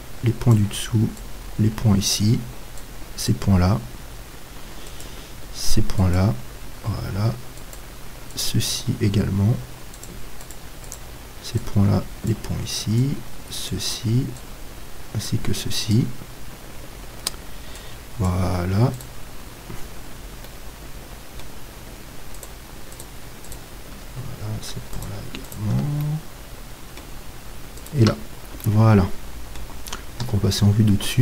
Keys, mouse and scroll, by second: 21.0-22.4 middle drag, 22.4-27.4 right drag, 25.9 middle click, 26.1-27.4 drag, 27.4 middle click, 27.8-29.7 right drag, 29.1 click, 29.5-30.6 middle drag, 30.3 KP_7.